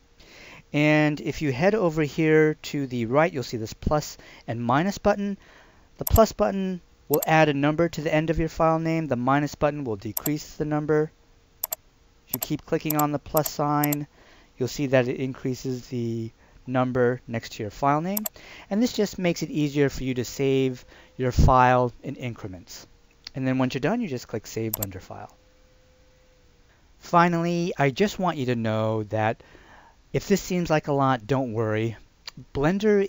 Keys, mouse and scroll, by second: 6.0 click, 10.1 click, 18.1 click, 24.7 click.